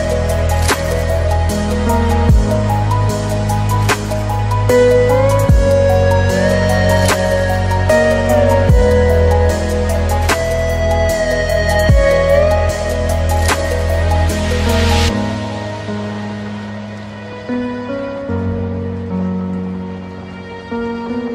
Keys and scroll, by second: 0.7 ctrl+space, 9.4 ctrl+space.